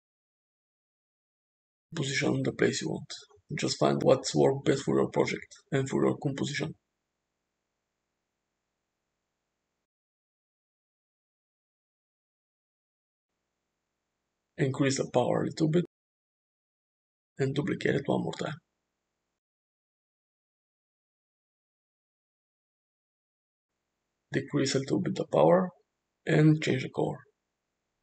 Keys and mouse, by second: 0.9 f, 3.1 g, 4.4 r, 5.3 g, 6.0 r, 9.1 g, 10.1 r, 12.2 g, 14.5-16.9 drag, 17.6 shift+d, 18.7 r, 20.6 g, 23.8-25.5 drag, 26.1 click.